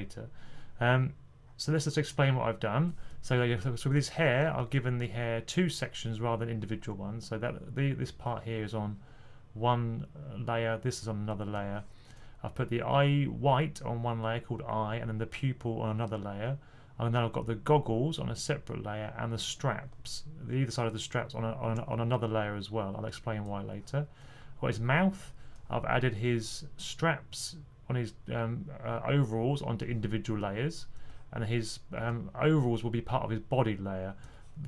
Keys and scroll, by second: 3.4 typing, 4.5 typing.